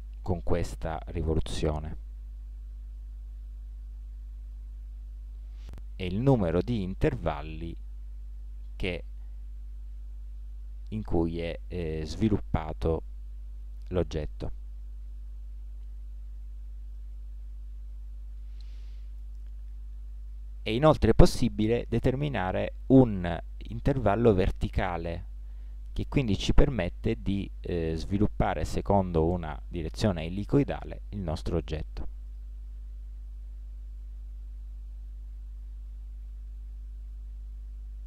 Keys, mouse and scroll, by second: 7.1-9.0 drag, 15.3-16.8 middle drag, 25.8-27.7 drag, 36.4 1, 37.7 KP_1.